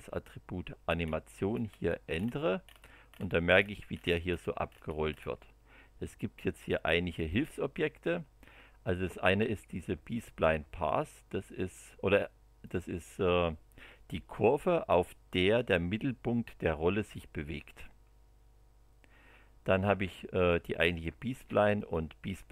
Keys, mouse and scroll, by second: 0.9 scroll up 1, 1.5-1.8 scroll up 2, 2.1-4.8 scroll up 14, 4.8 scroll down 2, 12.6 click, 17.5 space, 20.3 click, 20.9 click, 21.3 space, 21.7 click, 22.3 space.